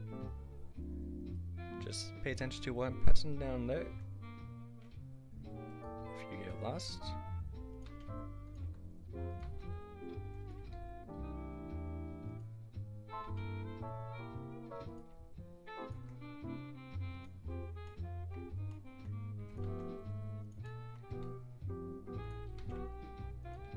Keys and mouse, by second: 0.1 e, 3.8 s, 6.8 e, 7.9 s, 8.6 e, 9.5 s, 10.6 e, 13.3 s, 15.1 e, 15.9 s, 18.3 click, 19.4 e, 19.6 s, 21.1 e, 22.8 s.